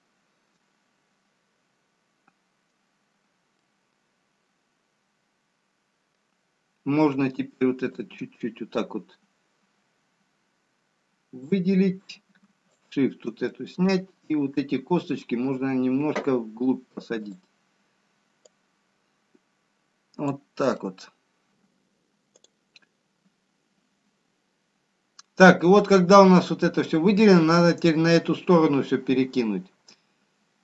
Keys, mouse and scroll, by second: 1.0 middle click, 3.7 scroll down 1, 4.7 middle click, 9.4 shift+click, 13.4 shift+click, 14.1 middle click, 17.5 click, 18.7 click, 28.8 middle click.